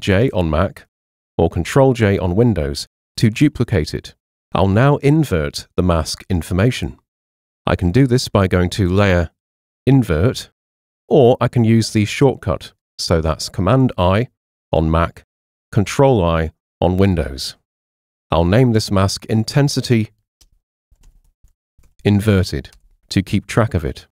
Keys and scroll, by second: 1.2 super+j, 15.3 super+i, 20.1 Right, 20.4-22.3 typing, 22.7 Return.